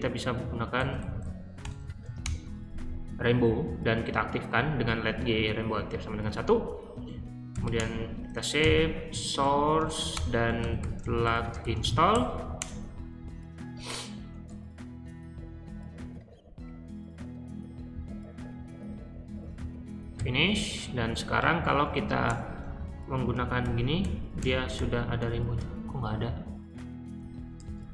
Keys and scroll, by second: 0.0-2.4 typing, 7.2-12.5 typing, 15.3-16.1 typing, 20.1 q, 21.3-22.2 typing, 23.3-25.1 typing, 27.1-27.9 typing.